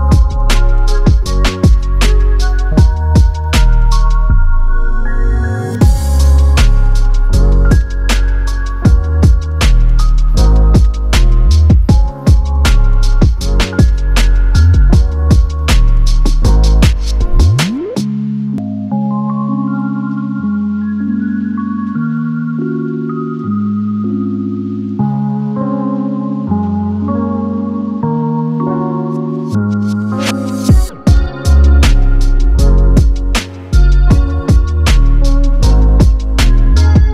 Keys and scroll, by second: 1.3-2.2 typing, 3.7 g, 6.4 v, 9.5-10.4 typing, 10.5 super+z, 13.5 g, 19.7 typing, 22.2-22.9 typing, 26.1 g, 27.4 typing, 28.5-29.2 typing, 33.6 typing, 34.9 typing, 36.0 shift+super+v, 36.5-37.1 typing.